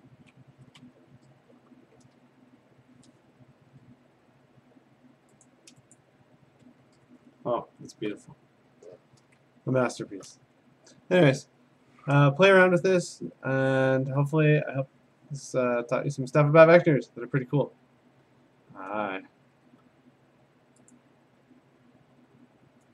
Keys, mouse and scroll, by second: 0.0-1.3 typing, 5.5 click, 6.0 click, 6.7-7.1 ctrl+scroll, 7.1-7.6 scroll down 6, 7.7 scroll up 2, 9.3-10.3 scroll up 6, 10.7 scroll, 10.7 middle click, 17.3 scroll, 18.0 scroll, 19.5 alt+Tab, 19.5-20.4 scroll, 21.0 click, 21.0-22.4 scroll up 3.